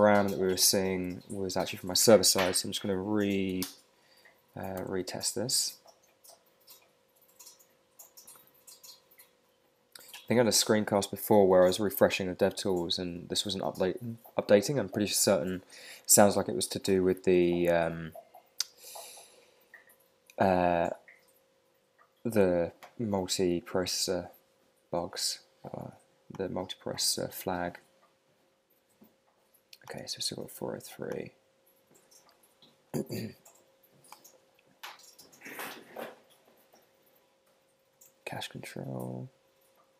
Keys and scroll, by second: 4.7 super+r, 23.3 super+Tab.